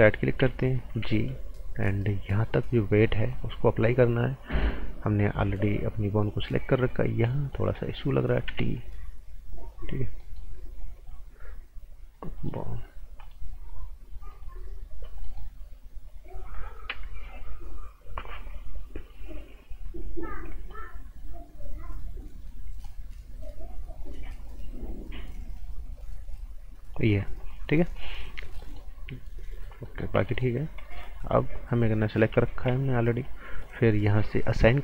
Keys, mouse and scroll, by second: 0.8 g, 2.1 click, 6.8 scroll up 1, 7.3 right click, 7.6 scroll up 1, 7.7 right click, 8.4 t, 8.7-9.9 scroll up 1, 9.9 scroll down 1, 10.2 right click, 10.9 click, 14.9 scroll down 1, 15.2 right click, 16.0-16.5 scroll down 1, 16.5 scroll up 1, 16.9 t, 17.2-17.6 scroll up 1, 17.6 scroll down 1, 19.6 scroll up 1, 20.5 right click, 20.8 scroll up 1, 22.8 click, 27.1 scroll down 1, 28.0 right click, 28.9 scroll up 1, 29.6 scroll down 1, 29.8 right click, 30.3 alt+right click, 30.6 scroll down 1, 30.8 right click, 31.2-32.6 scroll up 1, 32.6 g, 33.2 click.